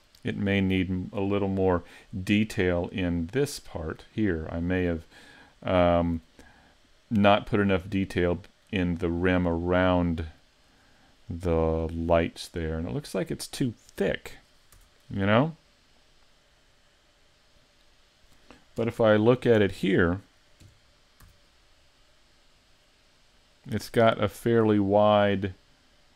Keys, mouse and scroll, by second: 0.3 scroll up 4, 1.1-2.8 scroll down 1, 2.8 scroll down 2, 4.6-7.8 scroll down 2, 9.6-10.0 scroll up 4, 10.0 middle click, 10.8-11.5 scroll up 2, 11.2 middle click, 13.9 right click, 14.8 Tab, 15.3-17.1 scroll up 4, 18.8 KP_1, 19.4 KP_5, 20.6 KP_5, 21.3 z.